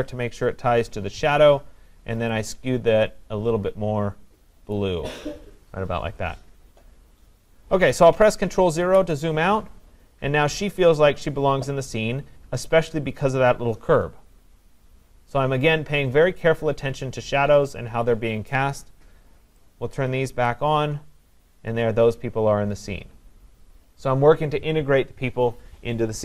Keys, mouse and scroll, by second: 4.8 click, 8.8 ctrl+0, 8.8 click, 20.5-25.5 drag.